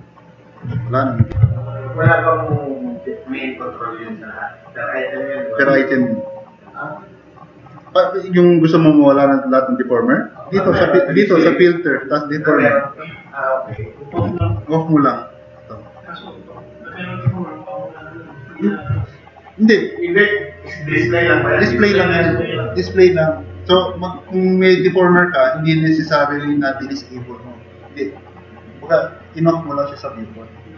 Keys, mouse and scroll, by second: 1.5 super+-, 14.4 super+=.